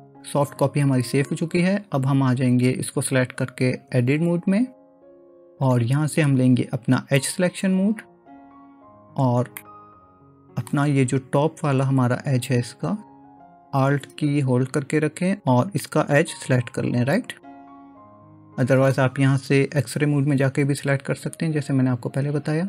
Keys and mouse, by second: 4.0 Tab, 7.3 click, 9.6-10.7 middle drag, 17.9-19.0 middle drag.